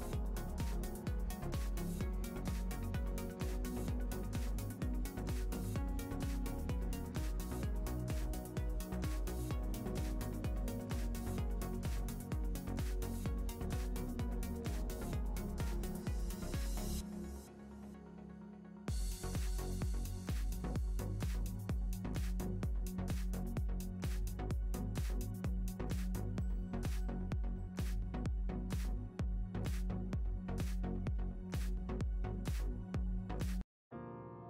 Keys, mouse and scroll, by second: 0.3 z, 1.0-2.1 shift+right drag, 1.2-1.6 scroll, 2.1 click, 6.9 Return, 6.9 click, 9.6-12.3 shift+middle drag, 9.9 scroll up 2, 11.0 click, 11.6 scroll up 1, 12.3 click, 13.7 middle click, 14.0 click, 14.9-23.3 middle drag, 16.7 scroll down 2, 18.9-19.6 scroll up 2, 19.9-20.2 scroll up 1, 20.2 click, 21.1 Tab, 21.3 click, 21.7 shift+click, 22.1 click, 23.3 click, 23.3 Return, 23.9 middle click, 24.8-25.1 scroll down 2, 24.9 shift+middle click, 25.3 scroll up 1, 25.6 Tab, 25.7 click, 26.0 shift+click, 26.3 click, 26.6 Tab, 26.8 click, 26.9 scroll down 1, 27.3-32.8 middle drag, 28.1-28.4 scroll up 2, 28.4 click, 31.6-32.2 scroll down 2, 32.8 click.